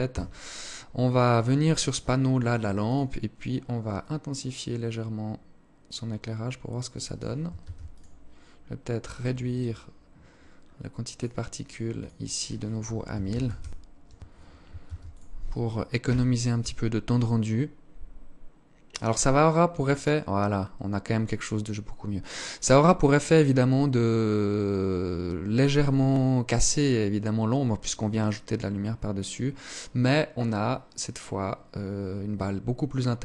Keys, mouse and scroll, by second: 0.3 right click, 1.9 click, 3.0 click, 6.6 ctrl+s, 8.6 right click, 9.6-10.1 scroll down 4, 10.1 click, 11.0 click, 13.9 ctrl+s.